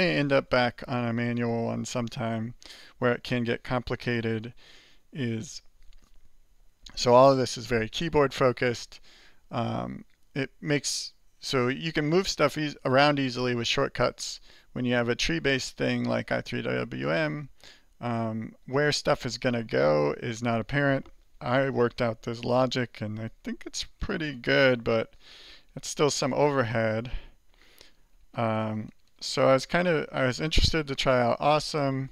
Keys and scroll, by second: 0.3 Up, 1.2 Left, 1.9 Right, 2.8 Left, 3.7 Left, 4.5 shift+Right.